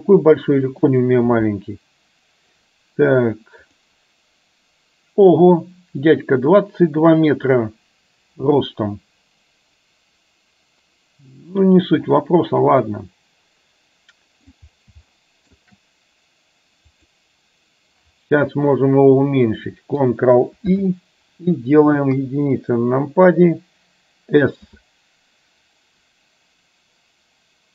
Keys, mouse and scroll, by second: 3.8 click, 12.9-14.5 middle drag, 15.1-15.6 shift+middle drag, 16.9 click, 20.8 ctrl+i, 22.1 KP_1, 24.8 s.